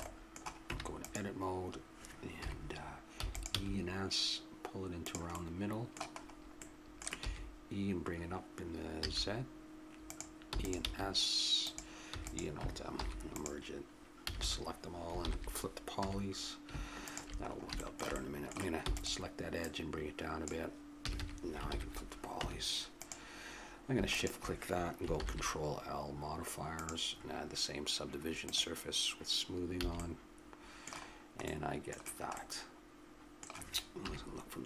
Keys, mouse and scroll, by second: 0.7 Tab, 2.4 KP_7, 3.2 e, 3.6 s, 7.2 e, 10.5 e, 10.8 s, 12.1 e, 13.0 alt+m, 14.3 a, 14.4 a, 15.2 ctrl+n, 16.0 a, 18.4 middle click, 18.8 e, 19.6 middle click, 21.0 a, 21.2 a, 21.7 ctrl+n, 22.4 Tab, 24.1 click, 25.1 ctrl+l, 28.5-30.0 drag, 29.8 a, 30.0 middle click, 30.1 click, 31.6 middle click, 34.0 KP_3.